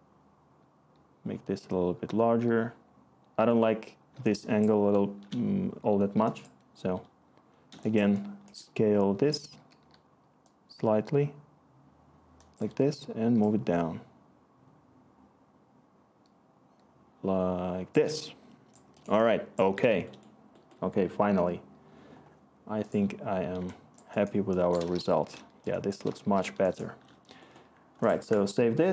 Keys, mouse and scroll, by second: 9.1-9.5 typing, 12.6 t, 25.3 w, 26.2 w, 28.1 ctrl+s.